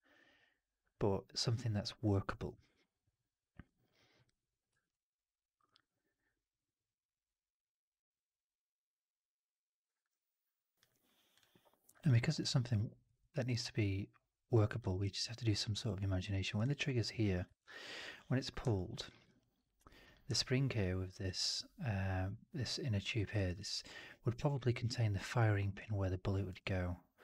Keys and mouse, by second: 4.8-9.9 alt+drag, 11.9 alt+click, 12.3-12.9 alt+drag, 13.1 alt+middle click, 13.2 alt+right drag, 13.5-14.7 alt+drag, 14.8 alt+middle drag, 14.9 alt+right click, 15.1 alt+drag, 15.5 alt+right drag, 15.6 alt+right click, 15.7 alt+drag, 16.1 alt+middle drag, 16.3 alt+right drag, 16.5 alt+drag, 17.5 alt+click, 18.6 alt+drag, 19.0 alt+middle drag, 19.1 alt+right drag, 19.9 click, 20.2-21.1 alt+drag, 23.0 alt+middle drag, 23.2 alt+right drag, 23.4-24.2 alt+drag, 24.4 alt+middle drag, 24.6 alt+right drag, 24.8-25.6 alt+drag, 26.4-27.2 drag.